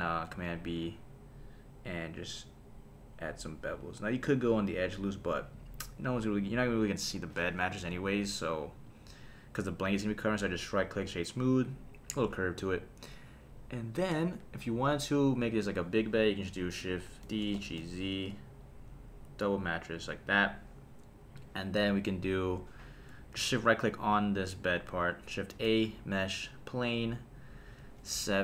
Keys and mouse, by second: 0.3 super+b, 5.3 click, 7.9 Tab, 8.4 right click, 15.5 click, 16.1 KP_3, 17.2 shift+d, 17.5 g, 17.8 z, 20.0 click, 20.3 click, 24.2 shift+click, 24.7 shift+right click, 25.4 shift+a, 28.1 KP_7.